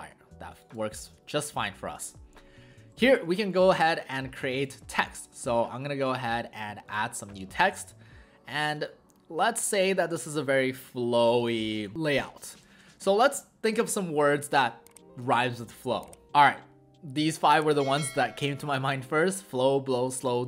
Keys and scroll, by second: 11.0 Caps_Lock, 11.3-11.6 typing, 13.8 Return.